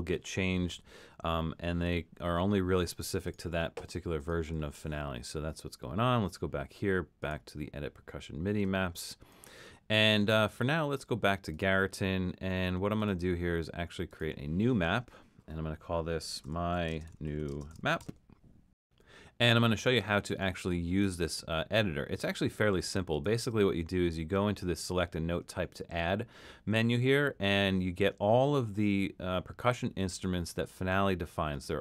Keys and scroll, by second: 16.5-18.5 typing.